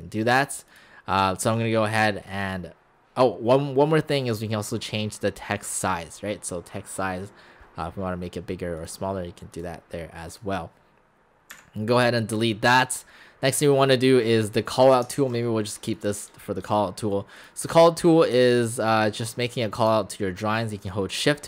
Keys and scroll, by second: 11.5 Delete, 15.2 ctrl+z.